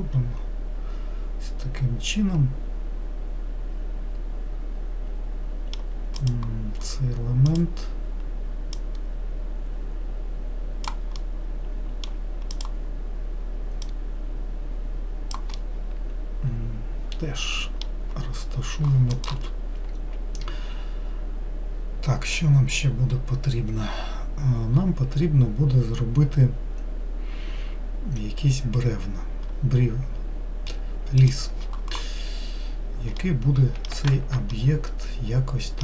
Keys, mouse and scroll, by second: 6.5 click, 7.8 click, 9.0 click, 11.5-12.8 middle drag, 12.8 click, 14.1 click, 15.8-18.8 middle drag, 18.8-21.8 scroll down 1, 32.8-33.5 scroll down 4, 33.5-35.8 middle drag.